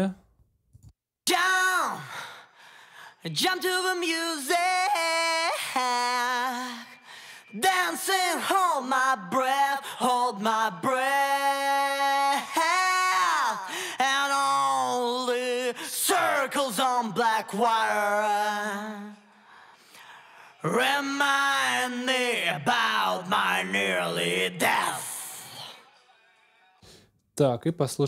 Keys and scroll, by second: 0.9 space, 26.6 space.